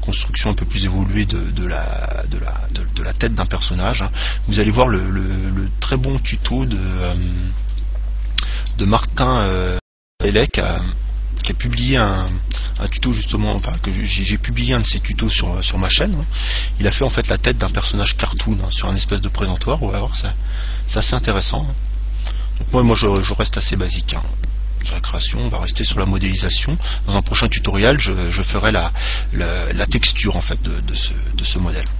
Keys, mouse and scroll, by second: 3.2 g, 7.0 click, 7.8 right click, 8.6 g, 11.0 click, 12.4 right click, 12.7 g, 13.9 click, 18.5 right click, 20.3 g, 21.8 click, 22.2-26.1 middle drag, 23.4 Tab.